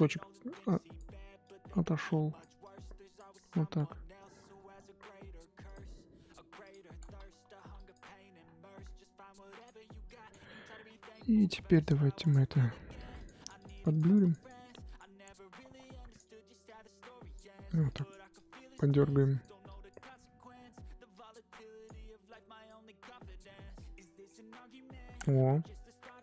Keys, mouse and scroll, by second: 6.6 click, 7.0 ctrl+z, 7.7-12.9 drag, 12.9 f, 13.4-23.2 drag, 23.2-23.8 scroll down 10, 23.8-26.2 middle drag.